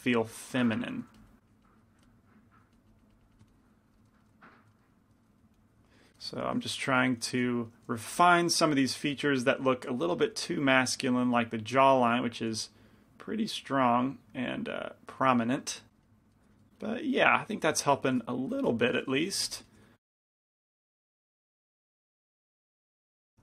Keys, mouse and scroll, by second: 0.8 f, 1.1-4.3 drag, 1.3 f, 2.1 f, 4.3 middle click, 6.0 click, 7.4 g, 7.4 f, 8.3 f, 9.6-12.7 drag, 10.1 f, 12.0 f, 12.7 f, 14.0-16.1 drag, 15.7-17.0 middle drag, 18.2 middle click, 18.8 f, 19.6 f, 19.6 g, 20.3 f, 20.7 click, 20.7 right click, 21.4 f, 21.9-23.4 drag, 22.3 f, 23.0 f.